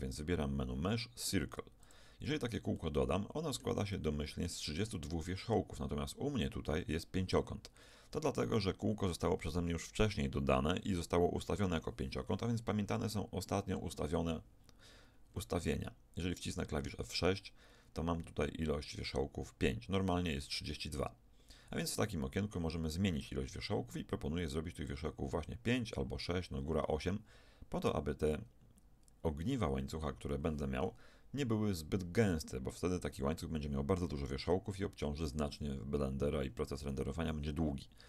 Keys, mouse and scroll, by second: 2.7-6.7 middle drag, 15.3 F6.